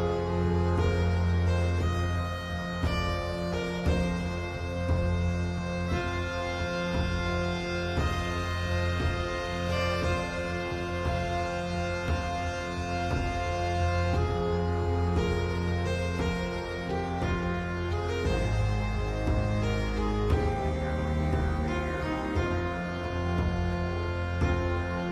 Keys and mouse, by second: 7.1-8.6 middle drag, 9.0 middle click, 11.2 KP_1, 12.3 KP_7, 14.0 click, 17.4 KP_1, 19.5 g, 22.3 g.